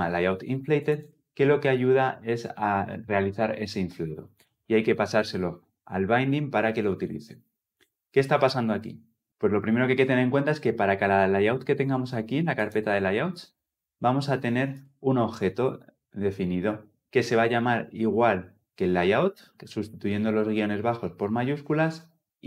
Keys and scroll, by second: 13.6 ctrl+alt+Left, 15.7 ctrl+alt+Left.